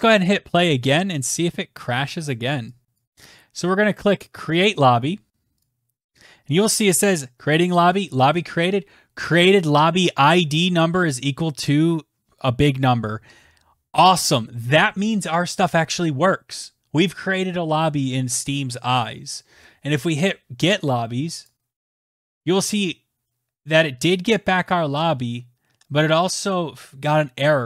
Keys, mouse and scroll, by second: 1.8 click, 2.4 click, 2.8 click, 3.0 click, 3.6 click, 5.0 click, 20.8 click.